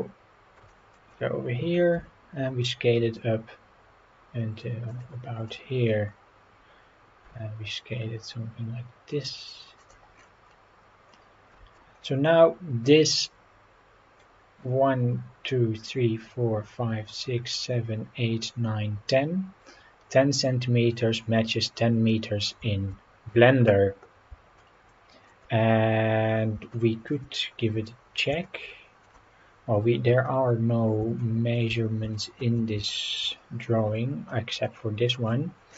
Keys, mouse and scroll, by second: 0.0-0.4 scroll down 3, 0.7 shift+middle drag, 2.0 s, 4.9 click, 5.4-6.2 scroll up 7, 6.7 scroll up 2, 7.2 s, 9.8 click, 10.1-10.6 scroll down 5, 11.1 scroll down 3, 22.1 scroll down 1, 24.6-25.3 shift+middle drag, 26.7-27.1 shift+middle drag, 27.4-27.8 scroll down 3, 28.5-29.1 shift+middle drag, 29.9 scroll up 3, 31.2-31.6 shift+middle drag, 32.2 shift+middle drag, 32.9 shift+middle drag, 34.0-34.5 scroll up 4, 34.7-35.2 middle drag.